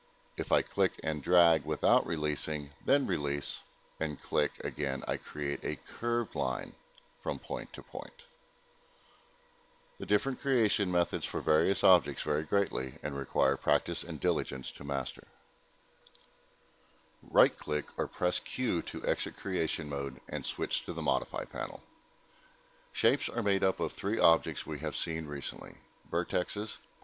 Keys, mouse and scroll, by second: 0.3 click, 3.3 click, 6.2 click, 8.3 click, 9.6 click, 20.3 click, 21.0 middle click, 24.1 click, 25.2 click, 26.0 click.